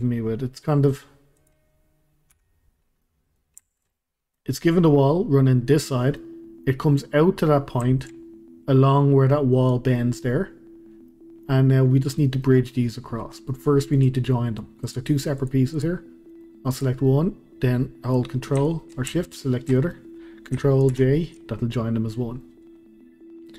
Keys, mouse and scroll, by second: 1.4 click, 2.3 Delete, 2.7 scroll up 1, 3.0-8.2 middle drag, 8.2-9.9 scroll up 1, 10.9 scroll down 1, 11.1-13.9 middle drag, 13.9 click, 14.3 scroll down 1, 14.4-14.9 middle drag, 14.9 drag, 15.4 drag, 15.7 drag, 16.3-16.7 middle drag, 16.7 click, 19.3 shift+click, 19.8-20.9 middle drag, 20.9 ctrl+j, 22.1-23.5 middle drag.